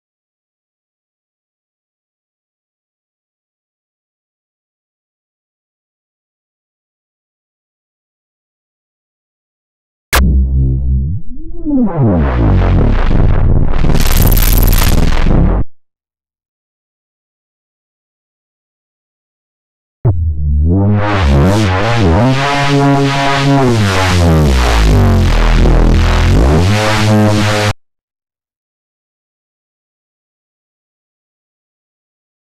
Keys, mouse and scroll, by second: 0.0 click, 3.6 click, 6.6 click, 7.8 click, 9.0 click, 9.9-15.6 drag, 16.4 click, 18.7 click, 19.8-27.6 drag, 28.6 click, 31.6 click.